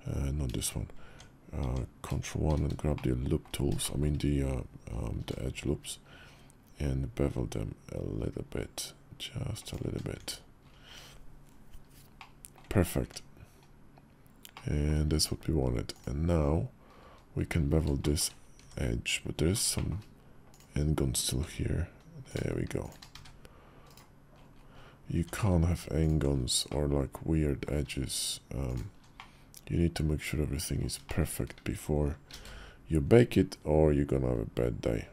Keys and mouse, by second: 0.8 Tab, 1.4 Tab, 2.2 shift+`, 2.7 middle click, 3.6 shift+middle click, 4.9 ctrl+b, 9.9 Tab, 11.9-12.3 middle drag, 12.8 Tab, 14.3 click, 17.8 shift+click, 18.4 Tab, 19.5 shift+click, 20.3 click, 21.2 g, 22.9 1, 22.9 `, 24.9 Tab, 26.5 click, 28.4 alt+shift+click, 29.0-30.6 middle drag, 30.8 shift+click, 32.1 ctrl+b.